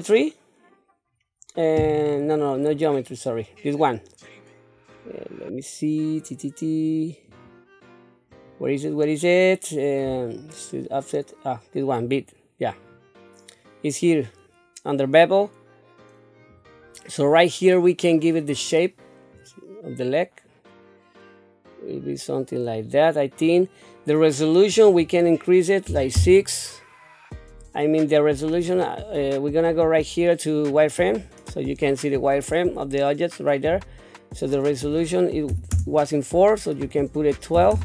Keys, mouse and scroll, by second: 2.7-5.0 scroll down 2, 5.0-6.2 scroll down 1, 7.3 click, 8.3 click, 12.0-16.5 drag, 17.4 middle click, 19.3-23.4 drag, 24.7-26.2 drag, 28.6-31.2 drag, 34.7-35.7 drag, 36.8-37.8 drag.